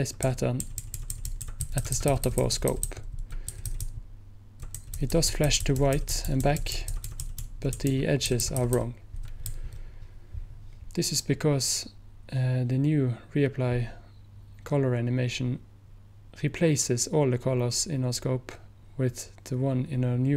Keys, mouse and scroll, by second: 0.0 Right.